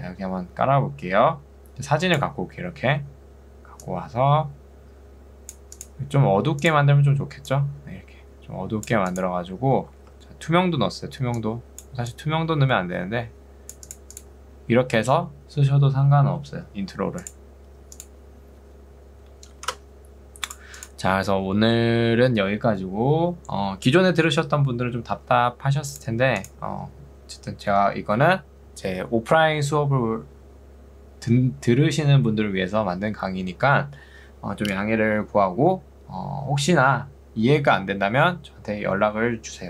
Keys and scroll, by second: 3.0 s, 10.2 ctrl+z.